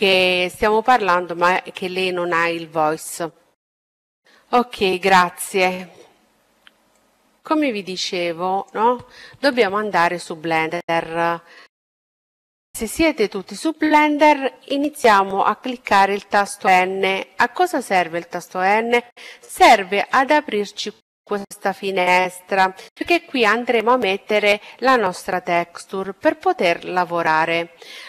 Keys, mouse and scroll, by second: 18.7-19.9 drag, 19.0 n, 24.2 middle click, 26.7-28.0 drag.